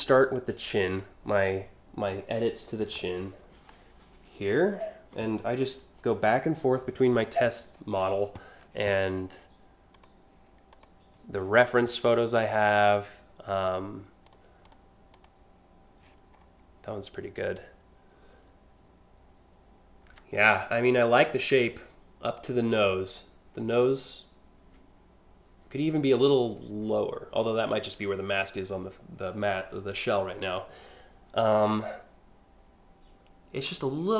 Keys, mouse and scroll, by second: 9.6 click, 10.4 click, 13.3 click, 13.9 click, 14.3 click, 14.8 click, 16.0 scroll, 16.2 scroll.